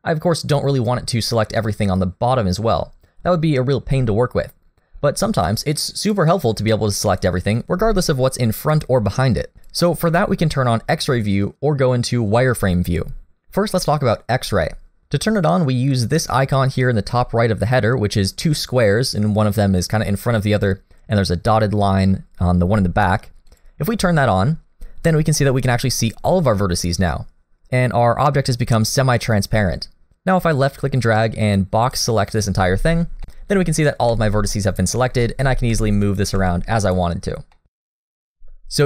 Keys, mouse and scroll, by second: 1.4 scroll down 1, 1.6 middle click, 4.9 scroll down 2, 5.3 middle click, 6.0 click, 7.2 click, 9.6 click, 15.0-16.6 scroll up 1, 23.5 click, 25.4 middle click, 30.2 click, 33.4 middle click, 34.1 g, 34.9 scroll down 1, 35.1 shift+middle click, 35.5 g, 36.1 g, 37.2 middle click, 37.9 shift+middle click, 38.1 shift+scroll down 1, 38.1 scroll up 1.